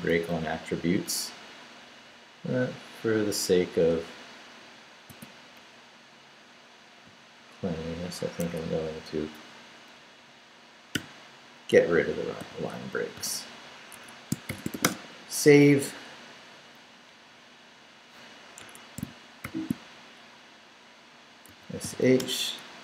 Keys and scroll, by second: 3.9 BackSpace, 5.1 space, 5.6 Up, 7.1 Down, 8.4 Escape, 11.0 0, 12.4 i, 12.7 BackSpace, 13.2 space, 13.9 Escape, 14.3-15.2 typing, 18.6 Escape, 19.4 shift+;, 21.5 s, 21.8 h, 22.2 Return.